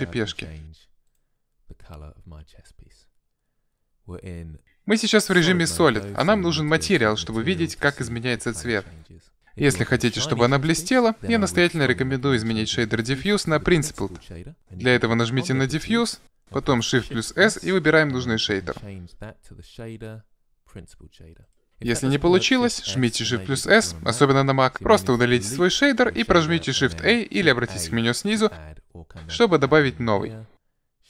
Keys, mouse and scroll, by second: 5.4-7.3 drag, 8.9 click, 12.8-17.5 drag, 17.6 shift+s, 25.8 Delete, 25.8 click, 27.2 shift+a, 29.5-31.0 drag.